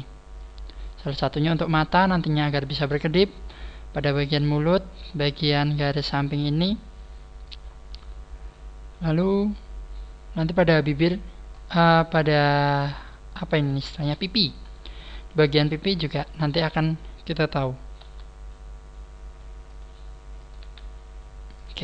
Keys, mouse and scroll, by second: 0.4 click, 7.6 scroll up 2, 9.4 scroll up 1, 11.4 scroll up 1, 11.8 right click, 13.6-14.0 scroll down 3, 16.6 right click, 18.0 g, 19.8 click, 20.4 click, 20.4 right click, 20.6 g, 21.6 click.